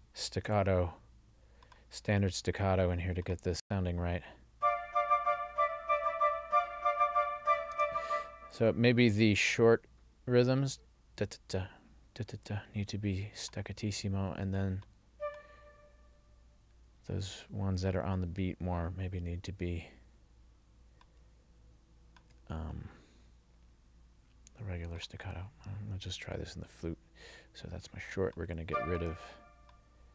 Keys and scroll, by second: 3.7 space, 7.8 space.